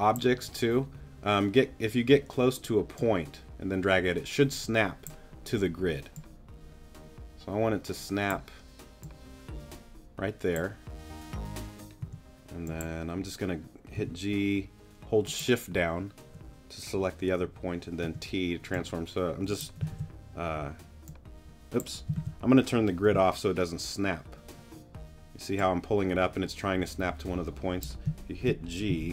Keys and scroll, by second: 12.0 t, 14.0 g, 18.0 t, 18.8 shift+t, 19.9 shift+super+z, 20.5 super+z, 22.1 super+z, 29.0 super+z.